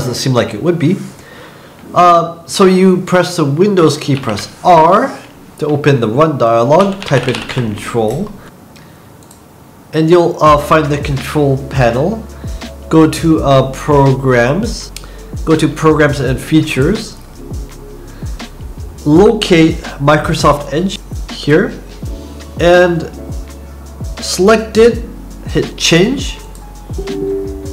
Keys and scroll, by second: 4.1 super+r, 6.5-7.9 typing.